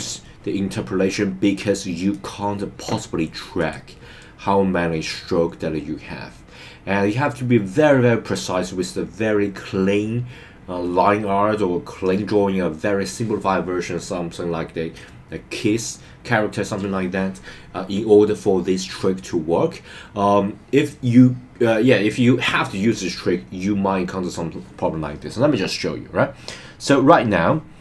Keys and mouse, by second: 2.1-3.7 drag.